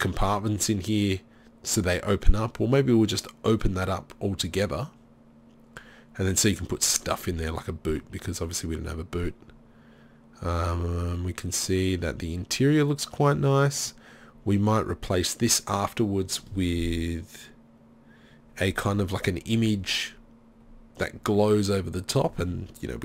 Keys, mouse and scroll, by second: 12.9-13.9 middle drag.